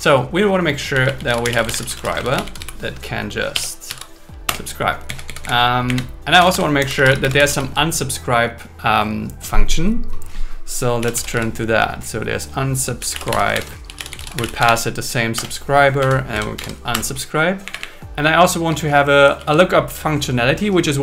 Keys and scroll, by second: 2.2 shift+s, 2.4 shift+s, 2.7 shift+s, 3.9 BackSpace, 4.5 Return, 5.1 Down, 5.9 Up, 6.5 Return, 7.4 space, 13.5 shift+8, 15.3 Return, 16.0 Right, 16.3 space, 16.5 alt+8, 16.9 Return, 17.7 Up, 19.4 super+Right.